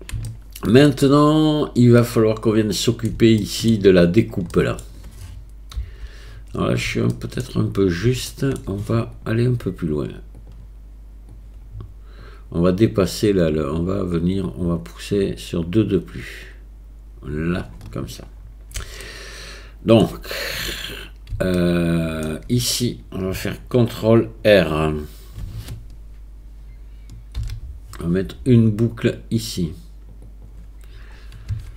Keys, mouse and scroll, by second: 0.3 shift+middle click, 2.0 middle click, 2.8 click, 3.0 middle click, 3.4 shift+click, 4.6 middle click, 5.8 KP_7, 7.1 shift+middle click, 8.3 shift+click, 10.4 click, 11.3 click, 14.3-17.6 drag, 19.0 shift+click, 19.2 shift+middle click, 19.2 shift+click, 19.3 shift+middle click, 21.6 shift+middle click, 27.4 ctrl+r.